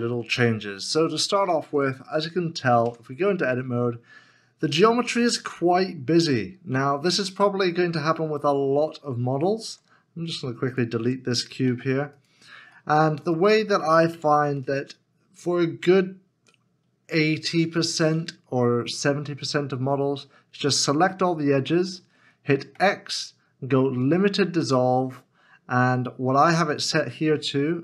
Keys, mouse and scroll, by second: 2.3 middle click, 3.5 Tab, 3.6 middle click, 6.1 scroll up 1, 6.7 middle click, 8.2 shift+middle click, 10.2 Tab, 12.7 x, 13.2 middle click, 14.6 Tab, 15.8 middle click, 22.7 x.